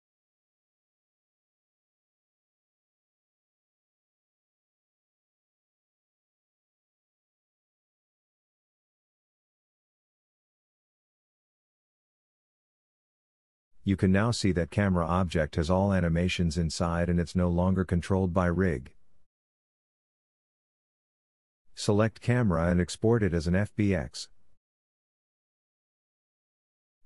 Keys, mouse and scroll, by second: 0.0-1.7 middle drag, 3.6 Tab, 4.4 middle click, 4.6 click, 4.7-5.8 middle drag, 5.8 click, 5.9-7.0 middle drag, 7.5-9.5 drag, 9.3 Tab, 9.5 right click, 10.1 middle click, 11.4 click, 13.2 click, 13.2 right click, 13.8-21.0 drag, 20.5 Tab, 21.0 right click, 21.5-23.0 middle drag, 23.0-27.0 drag.